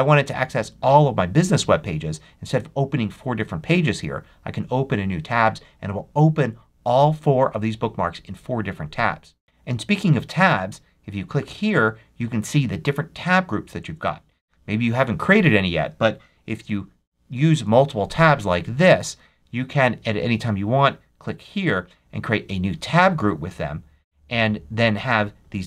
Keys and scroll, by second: 16.5 super+t.